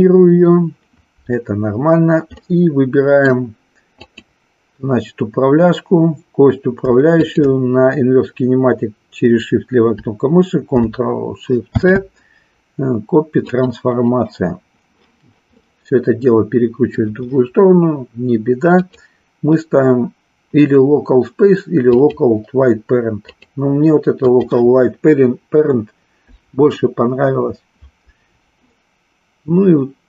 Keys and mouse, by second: 2.4 middle click, 4.0-5.5 drag, 7.3-8.7 shift+drag, 11.6 ctrl+shift+c, 15.7-17.1 middle drag, 18.8-22.2 drag, 23.2-24.5 drag.